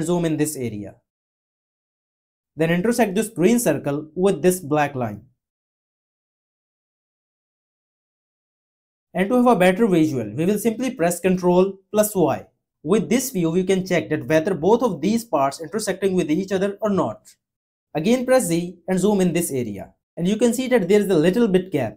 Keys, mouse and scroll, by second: 11.3 y.